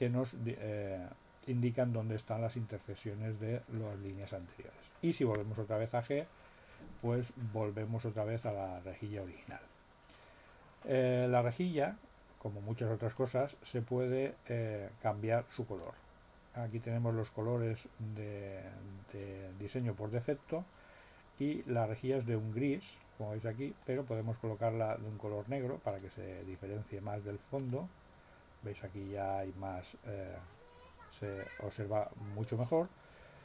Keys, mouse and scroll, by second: 5.3 g, 13.1 click, 15.7 click, 23.8 click, 25.9 click, 27.5 click.